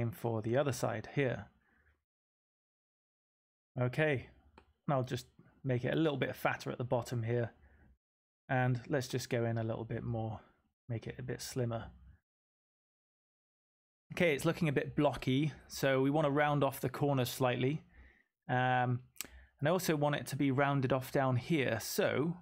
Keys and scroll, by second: 2.9-3.6 typing.